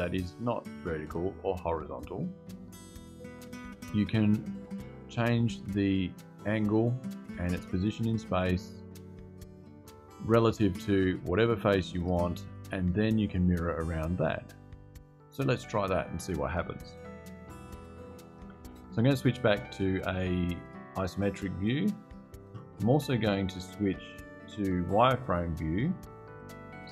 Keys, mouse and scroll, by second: 17.7 click, 20.9 click, 23.6 click, 25.5 click.